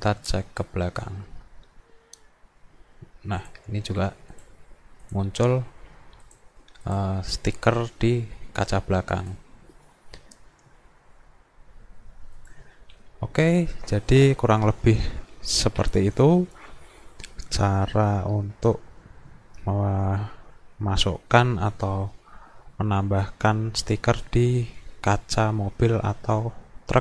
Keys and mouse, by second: 3.4 click, 4.3 click, 5.0 click, 5.6 a, 6.3 click, 6.9 click, 12.4 click.